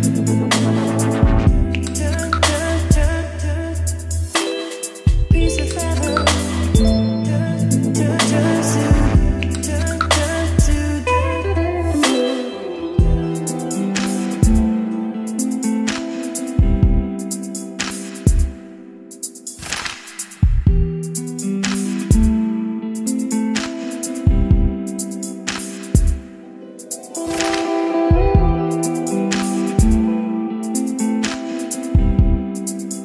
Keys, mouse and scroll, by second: 5.8-7.1 scroll down 2, 7.1-19.6 drag, 19.6-20.2 scroll down 2, 20.2-25.0 drag, 26.5-33.0 drag.